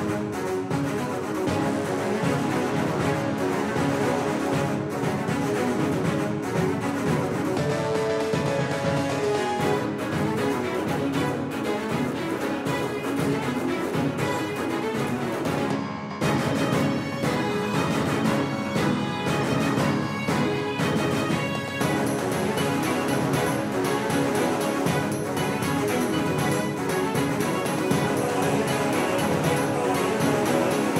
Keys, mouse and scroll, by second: 11.4 a, 13.3 c, 17.4 z, 18.8 a, 21.7 c, 25.6-27.8 drag, 26.4 a, 27.0 a, 27.6 c.